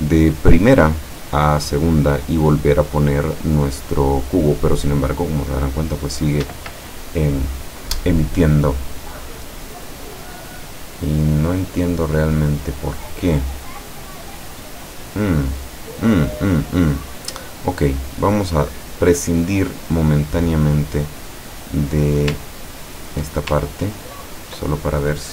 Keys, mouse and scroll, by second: 6.5 Escape, 9.2-12.0 middle drag, 12.2 scroll down 1, 12.4-13.9 middle drag, 15.3-16.3 middle drag, 22.4 ctrl+click, 24.0-24.8 ctrl+drag.